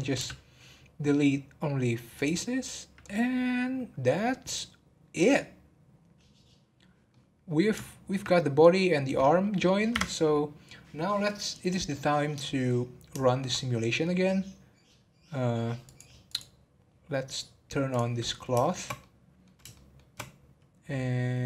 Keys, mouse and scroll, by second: 0.1 x, 3.0-6.1 middle drag, 7.1-9.9 middle drag, 9.9 Tab, 11.9-13.6 middle drag, 13.6 scroll down 1, 14.0-15.8 middle drag, 15.8 click, 16.2 click, 17.9 click, 18.6-21.4 shift+middle drag.